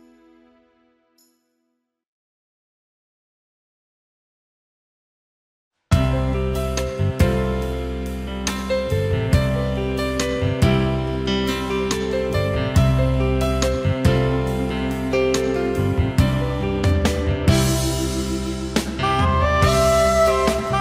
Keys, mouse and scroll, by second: 1.2 ctrl+shift+a, 1.5 alt+scroll down 1, 1.6 space, 2.6 alt+scroll up 1, 6.1 ctrl+shift+a, 6.5 alt+scroll down 1, 6.6 space, 7.3 alt+scroll up 1, 11.7 alt+scroll down 1, 11.9 space, 12.5 alt+scroll up 1, 17.6 ctrl+shift+a, 18.0 alt+scroll down 1, 18.2 space, 19.8 alt+scroll up 1, 20.6 space.